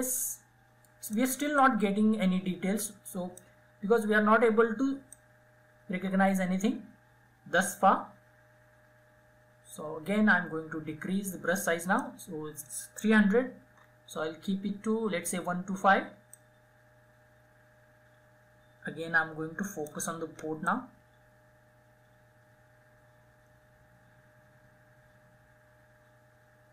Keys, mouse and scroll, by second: 0.9-12.8 drag, 13.0 [, 13.2 [, 13.7 [, 14.0 [, 15.7-26.7 drag.